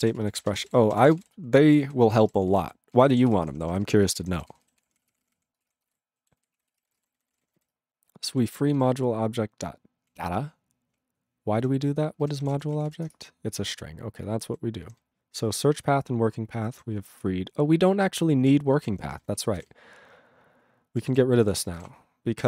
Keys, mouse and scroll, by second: 0.0 ctrl+a, 0.1 ctrl+space, 0.2 ctrl+e, 0.4 ctrl+n, 0.4 ctrl+e, 0.5 ctrl+n, 0.6 ctrl+e, 0.6 ctrl+g, 0.8 ctrl+space, 0.9 ctrl+a, 1.0 ctrl+p, 1.1 ctrl+p, 1.1 ctrl+g, 1.2 ctrl+e, 1.7 ctrl+s, 1.8 ctrl+g, 2.0 ctrl+a, 2.2 ctrl+space, 2.3 ctrl+n, 2.4 ctrl+n, 2.9 ctrl+g, 3.3 ctrl+s, 3.3 ctrl+space, 3.4 ctrl+p, 3.6 ctrl+p, 3.7 ctrl+p, 3.8 ctrl+g, 3.9 ctrl+space, 4.1 ctrl+n, 4.2 ctrl+n, 4.5 ctrl+g, 4.8 ctrl+s, 4.9 ctrl+p, 5.0 ctrl+p, 5.0 ctrl+e, 5.1 ctrl+p, 5.2 ctrl+e, 5.2 ctrl+p, 5.3 ctrl+p, 5.6 ctrl+space, 5.6 ctrl+a, 5.7 ctrl+p, 5.8 ctrl+g, 5.9 ctrl+e, 6.4 ctrl+s, 6.5 ctrl+a, 6.7 ctrl+space, 6.7 ctrl+e, 6.8 ctrl+n, 6.9 ctrl+n, 6.9 ctrl+e, 6.9 ctrl+g, 7.0 ctrl+n, 7.1 ctrl+n, 7.3 ctrl+n, 7.3 ctrl+e, 7.4 ctrl+n, 7.5 ctrl+n, 8.3 ctrl+space, 8.3 ctrl+a, 8.8 ctrl+g, 8.9-10.1 ctrl+p, 10.9-11.6 ctrl+p, 12.1-13.2 typing, 13.9-14.5 ctrl+n, 14.8 ctrl+n, 15.0-15.8 ctrl+n, 15.9-16.8 ctrl+n, 17.0-18.5 ctrl+p, 18.8 ctrl+n, 18.9 ctrl+n, 19.1 ctrl+n, 19.2 ctrl+n, 19.4 ctrl+a, 19.5 ctrl+space, 19.6 ctrl+n, 19.6 ctrl+w, 19.7-21.0 ctrl+n, 21.0 ctrl+e, 21.1 ctrl+n, 21.4 ctrl+p, 21.5 ctrl+a, 21.7 ctrl+space, 21.8 ctrl+n, 21.9-22.4 ctrl+p.